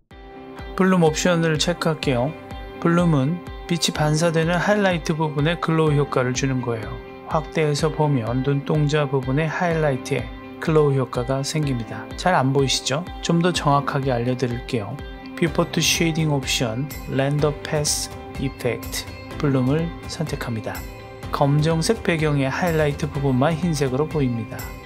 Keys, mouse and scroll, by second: 0.2 click, 2.2 click, 2.9 click, 3.4-4.7 scroll up 1, 4.7-5.4 shift+middle drag, 7.2 click, 8.1 click, 8.9 click, 9.5 click, 12.6 shift+middle click, 12.9-13.6 scroll up 1, 13.8 click, 15.5-21.4 drag, 22.7-24.2 drag.